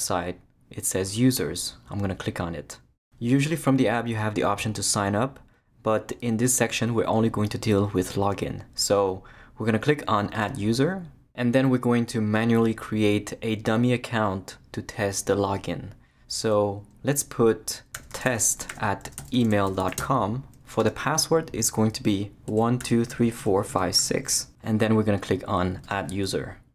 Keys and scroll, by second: 17.7-20.5 typing, 20.8 Tab, 22.2-24.5 typing.